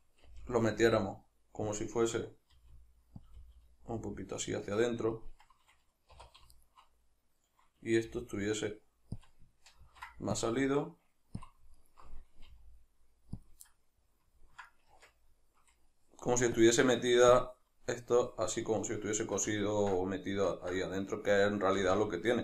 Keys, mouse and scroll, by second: 0.3 g, 1.8 click, 2.6 r, 3.3 click, 3.4 g, 5.3 click, 6.2 2, 6.6 alt+right click, 8.1 g, 9.3 click, 9.8 ctrl+r, 11.5 click, 11.8 alt+right click, 12.5 g, 13.5 click, 13.7-16.6 middle drag, 15.0 Tab, 16.6-18.6 drag, 18.6-22.4 middle drag, 21.8 a.